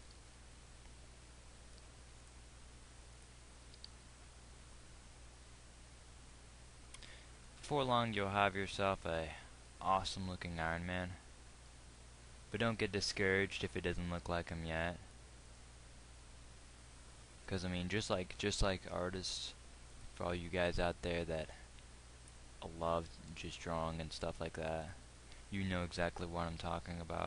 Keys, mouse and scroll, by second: 0.3 g, 4.3 g, 12.1 g, 16.9 g, 18.7 g, 23.6 g.